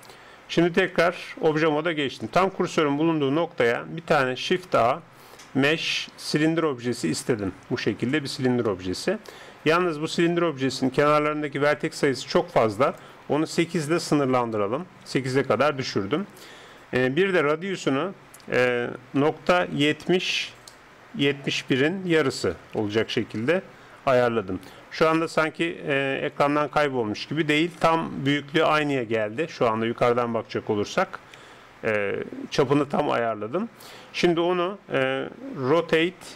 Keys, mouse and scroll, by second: 0.9 Tab, 4.3 shift+a, 8.7-12.9 middle drag, 12.9-14.8 drag, 17.6-19.5 drag, 25.7-27.8 middle drag, 27.8 z, 28.3 middle click, 29.4 KP_7, 30.9 z, 31.5 z, 33.0 z, 36.2 r.